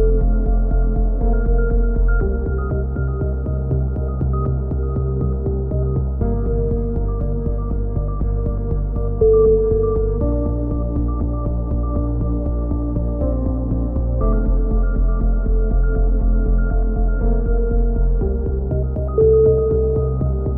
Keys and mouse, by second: 0.1 click, 0.8-1.9 drag, 1.4 KP_3, 2.9 z, 3.1 right click, 3.4 click, 4.5 click, 5.9 a, 6.1 click, 6.5 KP_3, 6.7 click, 6.8 right click, 7.3 a, 7.3 z, 7.4 click, 8.0-9.0 right drag, 8.7 f, 8.8 a, 9.4 click, 10.6 ctrl+r, 11.4 right click, 11.9 f, 12.1-13.2 right drag, 13.0 f, 13.1 a, 13.4 click, 14.3 KP_7, 14.3 z, 15.1-16.2 right drag, 15.5 e, 16.7-17.7 right drag, 17.0 e, 17.7 click, 17.9 g, 19.3 KP_3, 20.1 click, 20.1 right click.